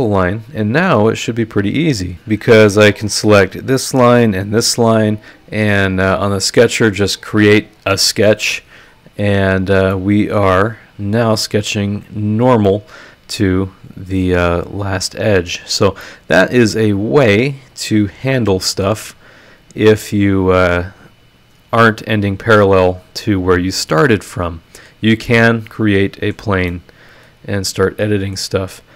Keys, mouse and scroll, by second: 0.1 click, 0.6 click, 1.6 click, 3.1 click, 4.1 ctrl+click, 6.3 click, 9.9 middle click, 10.0 click, 10.3 right click, 15.1 scroll down 1, 15.6 scroll up 1, 16.0-20.2 middle drag, 16.1-20.2 right drag, 25.2 scroll up 2, 25.2-26.5 middle drag, 25.3-26.5 drag, 26.7 middle click, 26.7 click, 26.7 right click, 27.4 scroll down 2, 28.0 click.